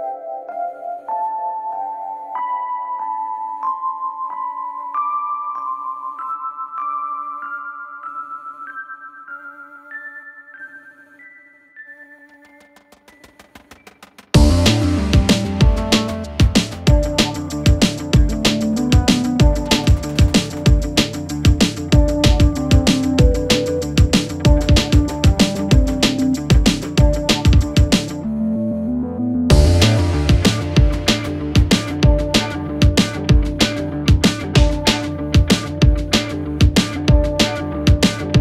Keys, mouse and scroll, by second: 0.4 g, 1.0-1.5 scroll up 1, 1.5 shift+a, 2.6 g, 7.7 click, 8.3 click, 8.5-8.9 scroll up 1, 8.9 click, 9.3 g, 11.5 click, 13.3-13.9 scroll down 3, 13.9 click, 14.9 click, 15.2 click, 15.6-16.0 scroll up 2, 16.0 Tab, 16.2-16.9 scroll down 2, 16.9 ctrl+r, 18.7 ctrl+r, 19.7 click, 20.0-20.6 scroll up 2, 20.6 click, 21.0-21.6 scroll up 1, 21.6 ctrl+r, 24.1 click, 24.7 ctrl+r, 27.4 scroll up 1, 27.6 click, 27.9-28.6 scroll down 3, 28.6 ctrl+r, 30.9 click, 31.5 ctrl+r, 34.0 click, 35.0 ctrl+r, 37.3 ctrl+r.